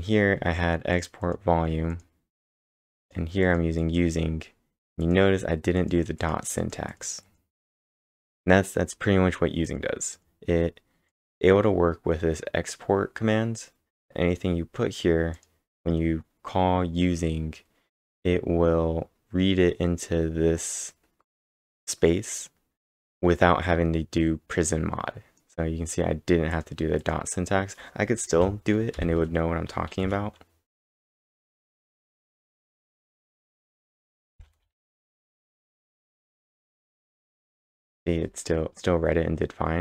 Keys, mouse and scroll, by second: 0.0-0.4 typing, 0.2 scroll up 5, 0.9 click, 1.2 click, 1.9 click, 3.0 click, 12.5-13.2 typing, 15.1-15.8 typing, 15.3 click, 26.5 click, 27.0 click, 28.4 Left, 30.5-32.5 typing, 34.3-36.1 typing, 36.4 ctrl+`, 36.7 Up, 36.9 Return.